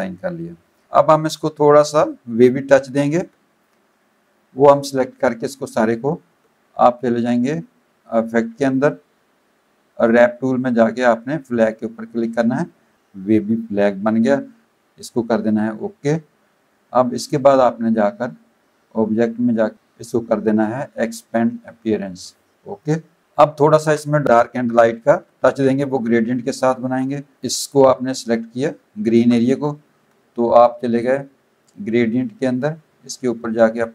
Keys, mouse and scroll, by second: 0.7 space, 0.7 click, 8.1 click, 11.7 click, 15.5 click, 18.9 click, 22.0 click, 22.8 click, 23.8 z, 24.1 click, 24.3 Tab, 25.2 v, 25.4 click, 25.6 Tab, 27.3 click, 28.5 click, 29.1 ctrl+z, 32.0 click, 33.6 click.